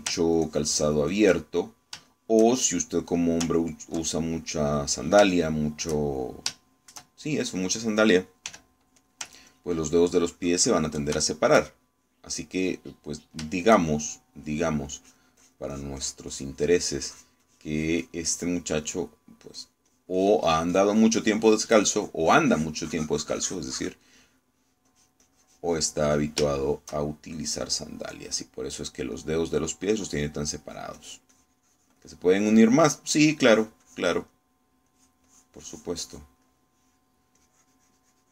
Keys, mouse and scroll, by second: 0.8 middle click, 1.5 ctrl+click, 2.5 ctrl+middle click, 3.2-4.2 ctrl+shift+middle drag, 4.5 ctrl+click, 5.2 ctrl+middle click, 5.9 middle click, 6.4 shift+middle click, 7.1-8.7 shift+middle drag, 9.6 f, 10.0 ctrl+click, 10.6-12.2 ctrl+drag, 12.4 ctrl+shift+middle click, 13.6-15.0 middle drag, 15.1 shift+middle click, 16.0-19.9 drag, 20.6-22.8 drag, 23.0-25.8 drag, 26.0-27.4 drag, 27.5-28.6 shift+middle drag, 28.9-30.0 shift+middle drag, 30.2-31.2 middle drag, 31.7-33.6 drag, 33.2 middle click, 33.9-35.2 drag, 35.4 middle click, 36.0-37.5 drag, 37.5 middle click.